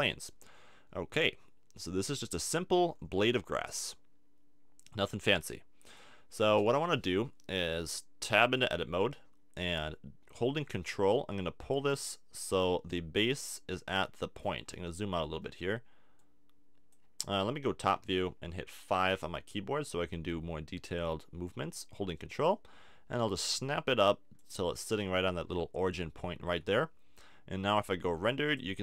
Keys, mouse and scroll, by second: 0.0-1.7 drag, 2.6 click, 4.9-8.6 drag, 8.6 Tab, 11.6-13.4 drag, 15.1-16.2 middle drag, 16.2-17.9 drag, 18.0 KP_7, 21.1 KP_5, 22.1-24.0 drag, 26.5 Tab, 26.5 click, 27.6-28.8 drag.